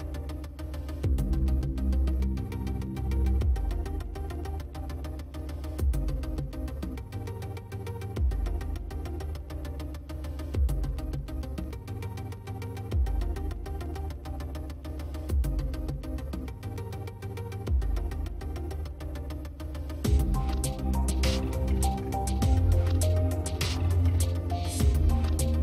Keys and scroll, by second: 4.5 space, 6.4 space, 9.1 space, 10.0 ctrl+space, 12.2 space, 14.6 space, 17.1 space.